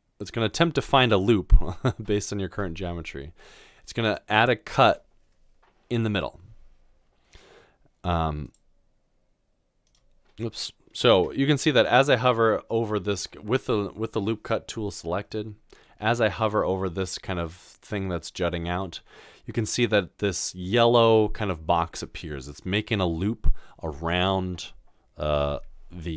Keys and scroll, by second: 11.2 ctrl+z.